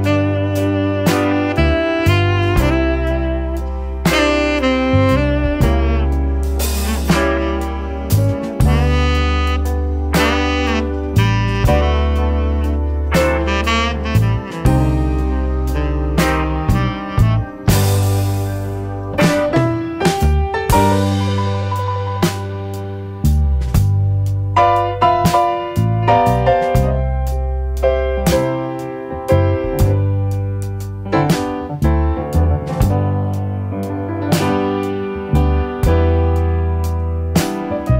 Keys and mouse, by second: 0.4 click, 3.3 click, 4.6-6.7 drag, 9.8 click, 11.3 click, 13.2 shift+click, 14.0 click, 14.6 click, 15.0 click, 16.4-16.7 drag, 17.2 shift+click, 17.8-18.3 drag, 19.4-22.4 drag, 22.9-23.5 drag, 25.1 shift+click, 30.2-30.9 drag, 32.6-33.7 drag, 35.0 click, 36.3 click, 37.2 shift+middle click.